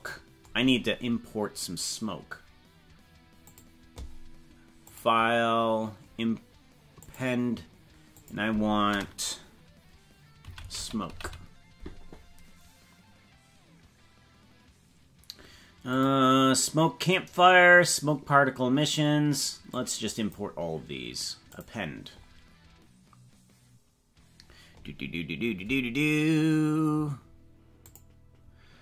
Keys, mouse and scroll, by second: 3.6 click, 5.0-7.3 drag.